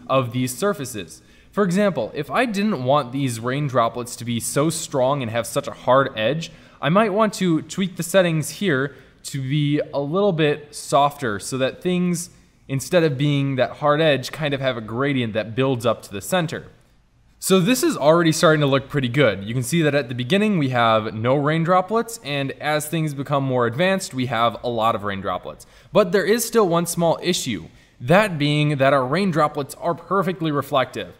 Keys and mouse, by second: 7.2 click, 9.7 middle click, 10.9-11.6 middle drag, 16.9 click, 17.1-18.1 middle drag, 18.7-19.1 drag, 19.1-20.2 drag, 22.3-26.2 drag.